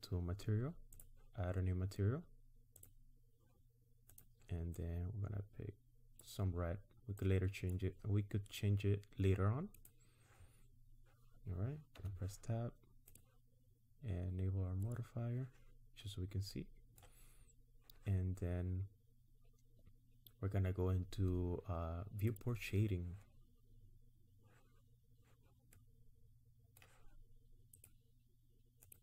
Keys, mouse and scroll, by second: 1.0 click, 2.8 click, 4.1 click, 12.0 Tab, 13.1 click, 14.9 click, 16.1-16.5 scroll down 2, 16.5 middle click, 22.5 click, 25.7 middle click, 27.9 click, 28.9 click.